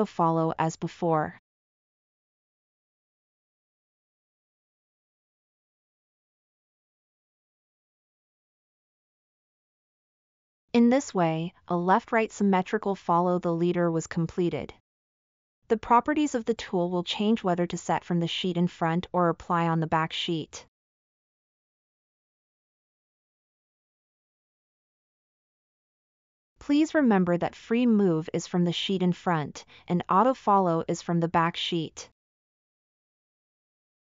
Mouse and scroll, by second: 24.6-25.7 middle drag.